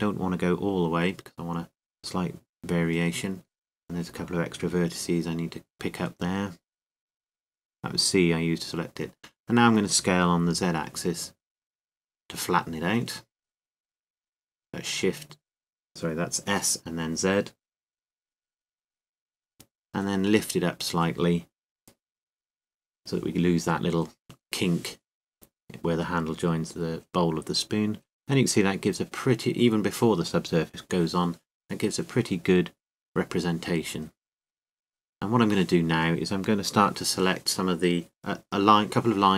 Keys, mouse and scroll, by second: 1.5-3.4 right drag, 2.1-5.6 middle drag, 6.3 c, 9.1-10.4 right drag, 9.7-11.4 middle drag, 13.8 s, 20.0-21.9 drag, 20.7-22.5 middle drag, 24.0-26.6 middle drag, 28.0-29.9 drag, 32.5 a, 33.4-35.6 middle drag, 36.8-38.1 right drag, 38.1-39.3 middle drag.